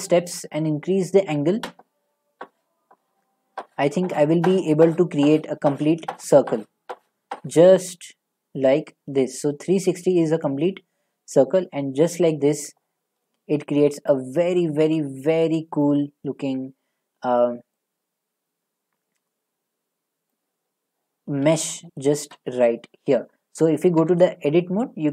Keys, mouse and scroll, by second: 12.1-15.1 drag, 15.1 click, 15.8-16.9 middle drag, 17.7-18.9 middle drag, 20.3 click, 21.1 middle click, 21.1 scroll, 22.3-22.8 scroll, 24.0 Tab.